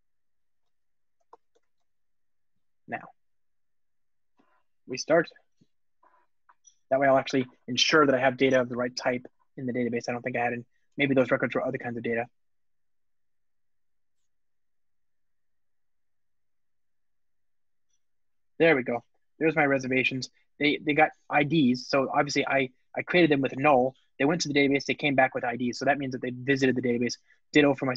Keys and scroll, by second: 1.7 alt+super+l, 4.7 ctrl+r, 5.9 alt+super+l, 10.9 alt+Return.